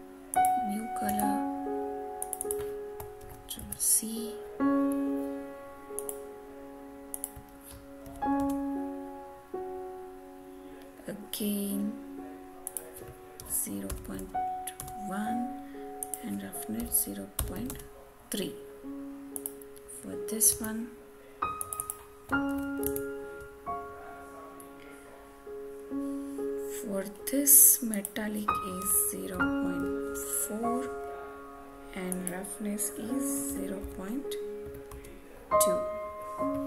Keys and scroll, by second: 1.0 alt+Tab, 3.1 ctrl+c, 3.5 alt+Tab, 8.0 ctrl+v, 8.3 Return, 14.7 Return, 20.4 alt+Tab, 22.4 ctrl+c, 22.8 alt+Tab, 30.0 Return.